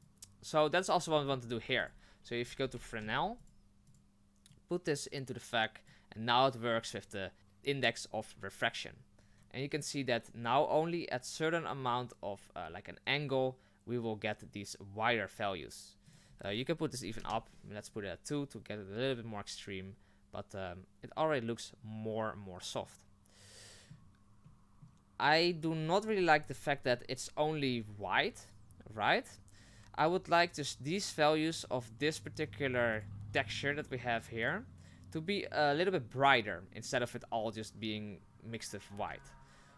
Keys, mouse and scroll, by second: 0.0 click, 5.9-25.6 drag, 30.0 click, 31.6 click, 33.0-39.7 drag.